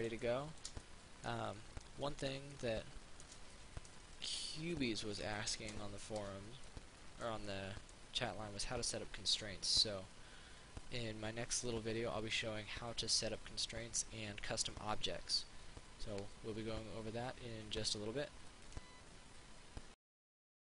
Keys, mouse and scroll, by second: 1.8-3.5 middle drag, 6.9 middle click, 18.9 click.